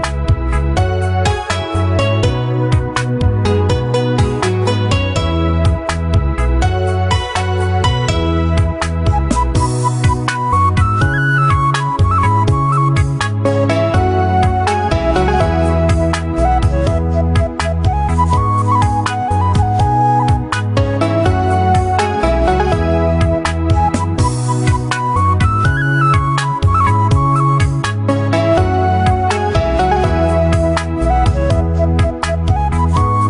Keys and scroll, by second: 32.7 ctrl+t.